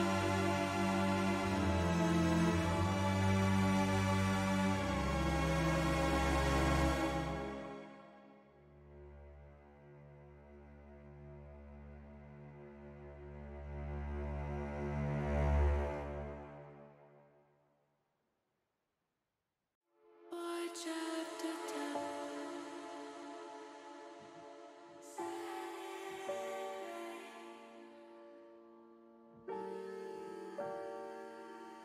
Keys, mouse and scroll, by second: 4.6 click, 7.1 alt+shift+click, 7.6 alt+shift+click, 8.7 alt+shift+click, 10.7 alt+shift+click, 12.5 alt+shift+click, 14.7 alt+shift+click, 15.2 middle click, 17.6 alt+shift+click, 19.1-20.3 middle drag, 21.4 middle click, 22.7 ctrl+b, 28.3 click, 29.0 click, 30.8 middle click, 31.6 middle click.